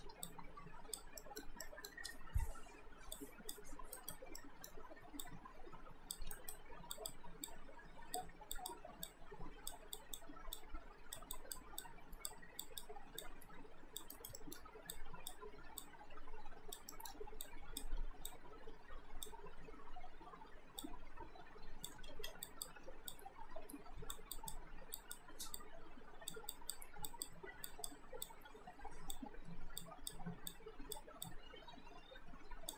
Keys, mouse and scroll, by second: 0.3 click, 1.2 alt+middle click, 3.1 click, 4.0 alt+right click, 4.4 alt+middle click, 5.2 click, 6.4 alt+right click, 7.0 click, 14.1 alt+right click, 14.4 middle click, 15.0 click, 16.9 middle click, 17.5 click, 20.5 r, 20.8 click, 22.2 ctrl+z, 22.4 click, 22.9 w, 23.1 click.